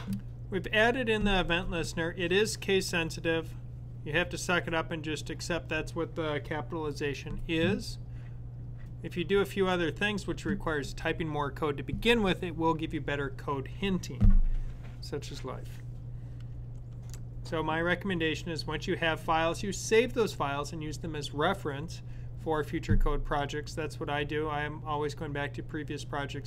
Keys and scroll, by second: 16.7 Down.